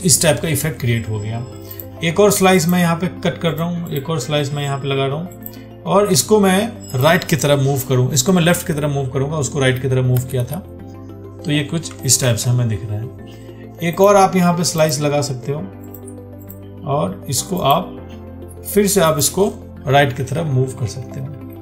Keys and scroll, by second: 12.5 ctrl+d.